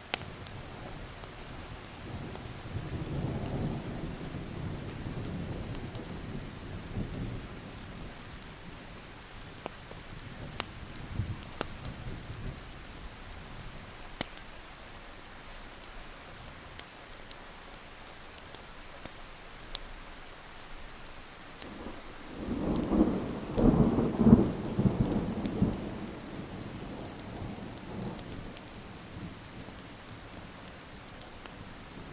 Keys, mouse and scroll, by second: 0.1 ctrl+scroll up 1, 1.3 click, 2.2 Delete, 3.9 click, 4.9 scroll up 1, 5.3 Delete, 5.6 click, 6.0 Delete, 7.2 Delete, 7.5 scroll up 1, 7.8 click, 8.5 Delete, 8.9 click, 10.0 ctrl+z, 10.1 click, 10.3 alt+scroll up 1, 10.5 click, 12.5 Delete, 12.8 click, 13.0-14.0 scroll up 1, 14.0 click, 16.1 Delete, 16.5 click, 17.2 Delete, 17.5 Delete, 17.7 click, 18.3 Delete, 19.8-20.8 drag, 20.9 Delete, 21.6 click, 22.8 Delete, 23.5 alt+scroll up 1, 24.2 click, 24.6 Delete, 24.8 click, 25.5 alt+scroll down 1, 25.8-26.7 alt+scroll up 3, 27.4 click, 27.7 alt+scroll up 1, 28.1-31.5 drag, 31.7 scroll down 1, 31.9 alt+scroll up 1.